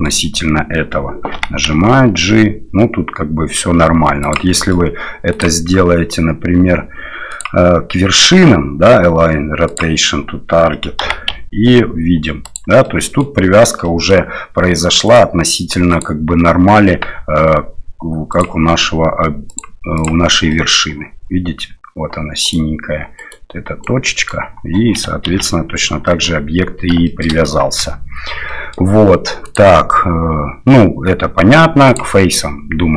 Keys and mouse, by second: 1.3 g, 4.6 middle click, 5.4-10.1 drag, 11.0 g, 12.8-13.3 middle drag, 13.8 middle drag, 15.1 click, 15.9 click, 17.2 Tab, 18.4-20.3 drag, 20.5 middle click, 22.5 right click, 23.3 right click, 23.8 right click, 25.3 ctrl+z, 26.1 click, 27.1 shift+middle click, 27.8 Tab, 28.5 middle click, 29.5-32.4 drag.